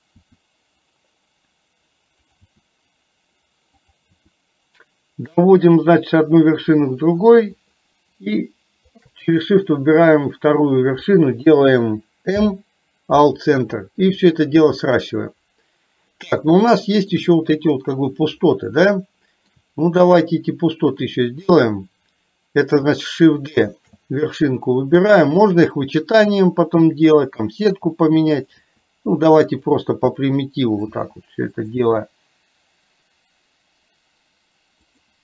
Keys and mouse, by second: 2.6 e, 12.4 m, 16.8 shift+middle click, 19.1 shift+middle click, 23.8 shift+d, 28.8 e.